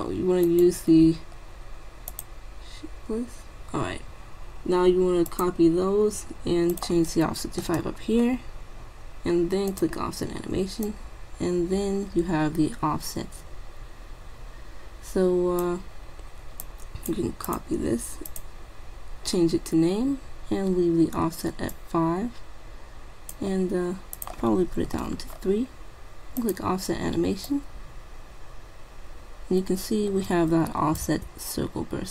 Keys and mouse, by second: 0.5-3.9 drag, 5.3-8.3 drag, 9.7-12.5 drag, 16.7-20.0 drag, 21.8-23.5 drag, 24.2-25.9 drag, 26.4-29.4 drag, 31.2-32.1 drag.